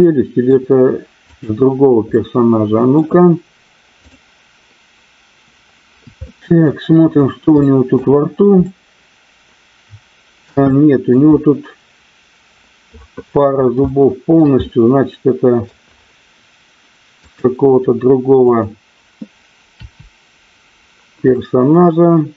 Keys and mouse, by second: 1.2 click, 2.1 middle click, 3.9 click, 6.2 shift+middle click, 7.6 shift+middle click, 8.6-10.4 middle drag, 10.7-11.2 shift+middle drag, 13.8-14.4 shift+middle drag, 14.5-15.7 middle drag, 17.2 click, 19.8 Delete, 21.4-22.3 middle drag.